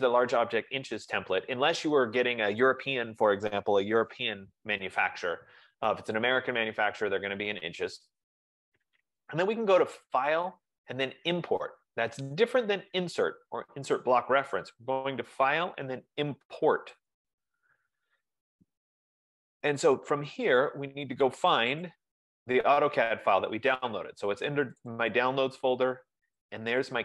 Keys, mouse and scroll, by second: 10.4-15.6 drag, 17.3-19.1 drag, 21.9 click, 25.0 click, 25.4 click, 26.6 click.